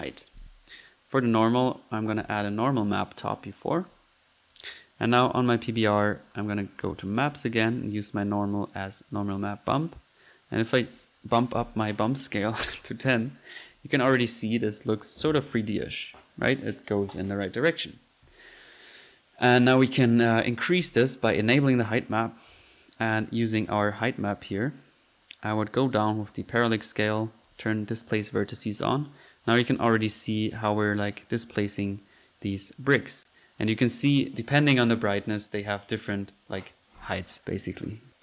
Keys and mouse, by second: 1.2-1.6 right drag, 1.8 click, 2.3 typing, 3.3-4.0 drag, 4.5 click, 5.2 click, 5.8-6.6 typing, 6.8 click, 7.9-9.0 drag, 9.4-10.7 typing, 9.4 click, 10.2 drag, 10.7-11.1 drag, 15.2 click, 15.4 F1, 17.2-18.1 typing, 19.1-20.1 drag, 21.6-21.9 drag, 23.1-24.5 drag, 26.1-26.8 drag, 27.5 click, 27.8 click, 29.0-29.8 drag, 35.0 click, 37.8-38.2 typing.